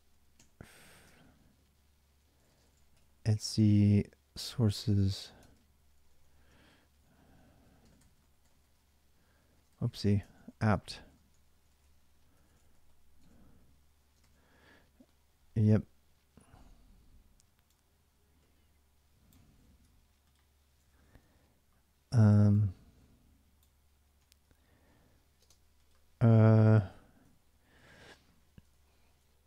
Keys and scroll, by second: 0.0-0.4 typing, 1.0 ctrl+a, 1.2 ctrl+a, 1.9-14.0 typing, 19.2 ctrl+a, 19.4 ctrl+a, 20.7 ctrl+a, 20.9 ctrl+a, 23.9 ctrl+a, 25.2 ctrl+a, 25.2 space, 26.9-28.6 typing.